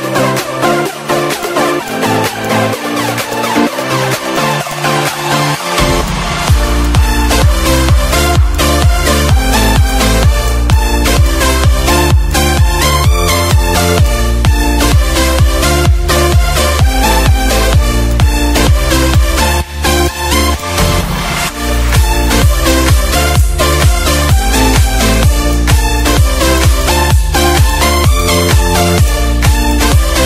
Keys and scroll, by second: 0.2 ctrl+d, 3.8 -, 12.9 ctrl+shift+=, 15.0 Down, 15.2 Up, 16.2 F5, 21.0 Up, 22.1 ctrl+d, 23.1 ctrl+d, 27.1 ctrl+shift+g.